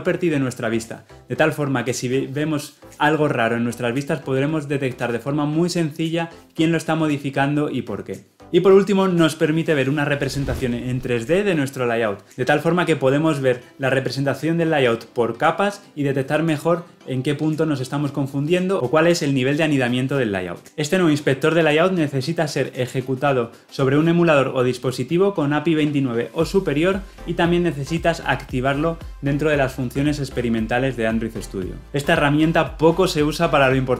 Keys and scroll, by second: 28.8 ctrl+alt+s.